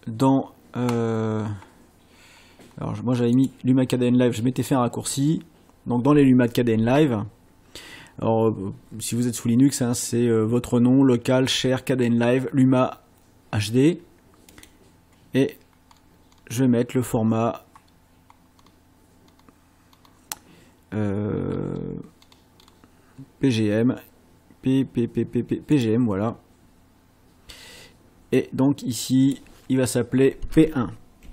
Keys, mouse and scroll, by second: 2.3-3.0 scroll down 2, 3.4 click, 14.6 click, 15.8-16.6 scroll down 2, 16.9-17.2 scroll down 1, 17.5 scroll down 1, 18.4-18.8 scroll down 1, 19.2-19.6 scroll down 1, 19.9-20.2 scroll down 1, 21.5 scroll down 1, 22.2-22.8 scroll down 2, 25.7 click, 28.4 click, 31.2 p.